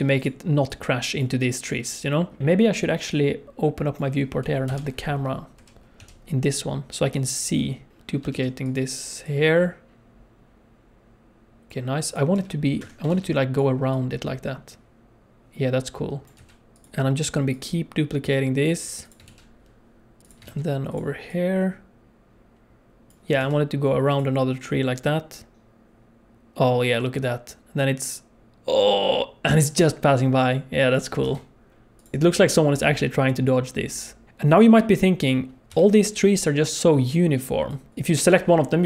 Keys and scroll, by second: 2.4 KP_0, 4.6 KP_0, 5.5 t, 5.9 n, 8.3 shift+d, 12.3 g, 13.1 shift+d, 16.3 g, 19.2 shift+d, 20.4 shift+d, 23.4 shift+d, 31.2 g, 35.7 g.